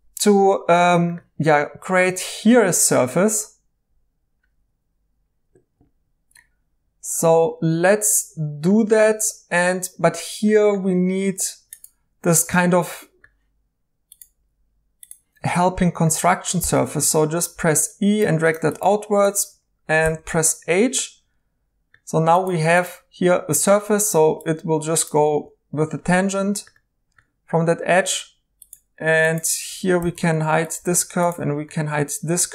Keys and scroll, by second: 16.6 e, 20.0 h, 25.3 ctrl+z, 30.0-30.7 typing.